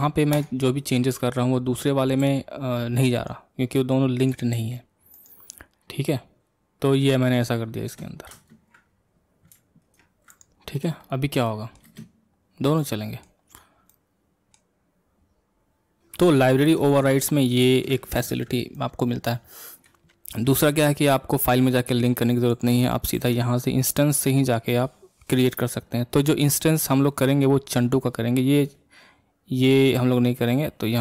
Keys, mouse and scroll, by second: 0.8-2.2 middle drag, 2.2 r, 4.3 click, 4.6 r, 5.5 scroll up 1, 5.5-7.8 middle drag, 8.4 ctrl+space, 8.9-9.9 scroll down 1, 9.9 ctrl+Tab, 10.4 click, 10.8 middle click, 11.0 scroll up 1, 11.0-11.4 scroll down 1, 11.4-11.9 middle drag, 11.9 space, 12.4-12.8 scroll down 3, 12.8-13.4 middle drag, 13.4-13.9 scroll up 2, 13.9-16.0 middle drag, 18.2 ctrl+space, 18.7-31.0 middle drag.